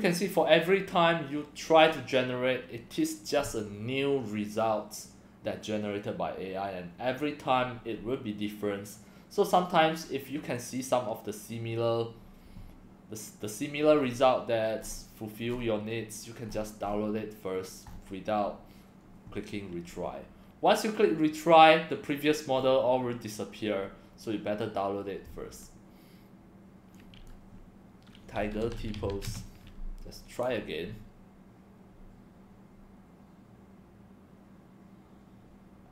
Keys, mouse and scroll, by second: 14.0 scroll down 4, 14.8 scroll down 1, 16.8 scroll up 2, 17.9 scroll up 1, 22.6 scroll down 2, 23.7-24.3 scroll up 4, 27.0 click, 28.1-29.6 typing.